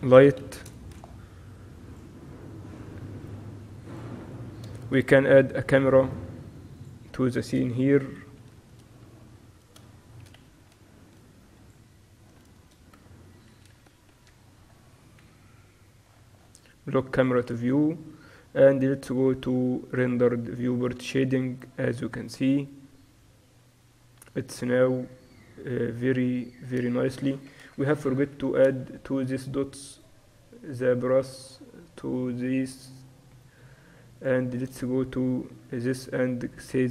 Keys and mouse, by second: 4.9 shift+a, 7.9-8.7 typing, 9.7-11.7 drag, 10.9 shift+b, 12.2 middle click, 12.7 z, 14.0 ctrl+alt+KP_0, 15.3 n, 17.3-21.5 drag, 17.4 n, 26.9 z, 27.7 KP_0, 28.2-29.4 middle drag, 28.6 z, 30.0-31.7 drag, 31.7 middle click, 32.0 click, 32.2 middle click, 34.3-36.9 right drag.